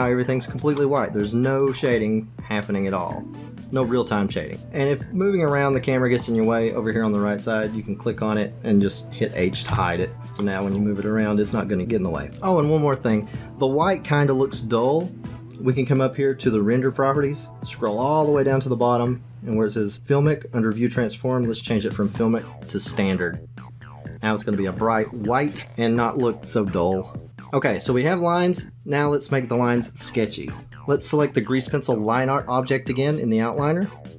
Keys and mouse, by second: 0.9 shift+middle click, 1.8-5.5 middle drag, 5.5 click, 7.7 click, 9.6 h, 10.5-12.2 drag, 16.8 click, 21.4-23.2 drag, 33.9-34.1 drag.